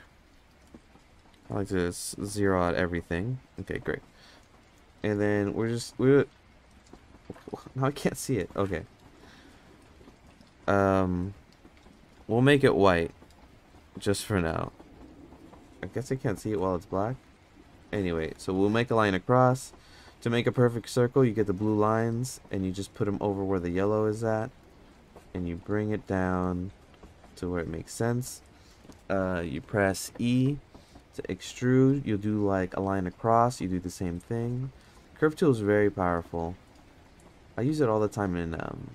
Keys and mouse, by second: 2.4 click, 5.4-8.4 drag, 9.2 ctrl+z, 11.5 click, 12.8 click, 12.8 middle click, 12.8 right click, 16.3-38.9 drag.